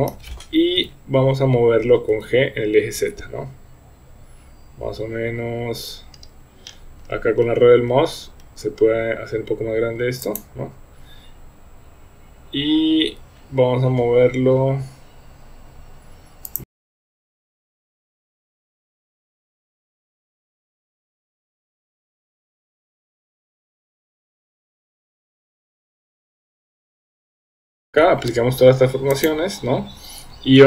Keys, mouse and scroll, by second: 0.8 KP_3, 2.1 g, 13.0 g, 16.7-20.9 typing, 17.4 click, 17.5 shift+middle click, 17.6 shift+middle click, 18.0 click, 19.5 middle click, 19.8 shift+middle click, 19.9 Tab, 20.0 shift+middle click, 20.3 Tab, 20.3 middle click, 20.5 click, 21.7 shift+middle click, 22.4 shift+middle click, 22.4-23.8 typing, 23.2 click, 23.9 Tab, 24.1 shift+middle click, 24.5 shift+middle click, 24.7 Tab, 24.8 click, 25.2 shift+middle click, 25.4 g, 26.2 shift+middle click, 26.4 middle click, 26.6 KP_7, 26.7 shift+middle click, 26.9 click, 27.0 g, 27.5 KP_1, 27.5 Tab, 27.6 shift+middle click, 27.9 ctrl+a.